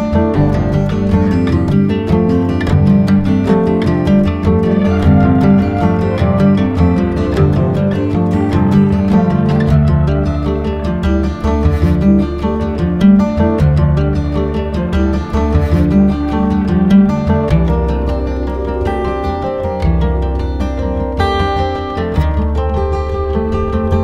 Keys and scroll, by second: 3.1 space, 15.6 space, 20.4 space, 23.0 space.